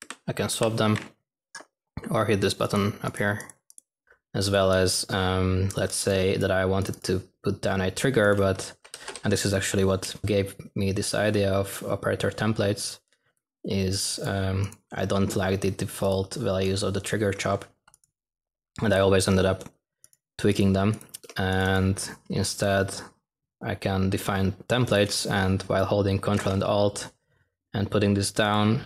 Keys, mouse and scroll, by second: 3.8-4.5 typing, 8.5-9.3 typing.